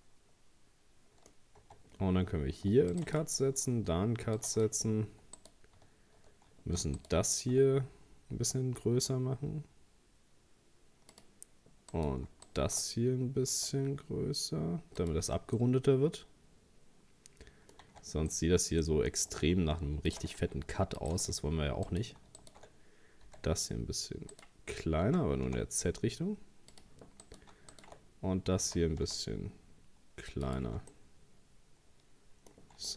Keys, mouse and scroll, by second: 1.3-1.6 scroll up 1, 1.6 Tab, 2.6 ctrl+r, 3.6 ctrl+r, 5.4 right click, 7.0 alt+shift+right click, 9.0 s, 11.9 right click, 12.5 alt+shift+right click, 13.5 s, 15.2 Tab, 15.6-17.8 middle drag, 17.8 Tab, 18.3-19.8 middle drag, 19.8 ctrl+r, 20.8 ctrl+r, 21.9 right click, 22.4 alt+shift+right click, 23.3 s, 25.1 s, 27.2 right click, 27.7 alt+shift+right click, 28.6 s, 30.6 Tab, 30.9-32.9 middle drag.